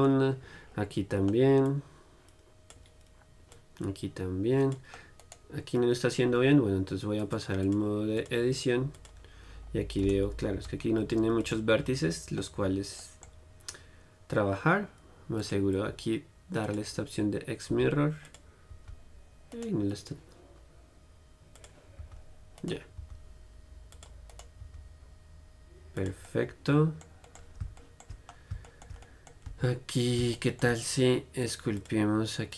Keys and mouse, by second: 0.7 click, 1.0-3.9 middle drag, 3.9-5.6 drag, 5.6-7.6 middle drag, 8.0 click, 9.3 click, 9.9 middle click, 10.3-12.6 right drag, 12.6 middle click, 13.2-20.2 drag, 18.0 g, 19.0 g, 20.2-21.8 middle drag, 21.8-24.1 drag, 22.2 g, 23.2 g, 24.3 click, 24.6-26.2 right drag, 24.9 g, 26.2 click, 26.3 right click, 26.7-28.0 drag, 28.1 click, 28.2 middle click, 29.7 Tab.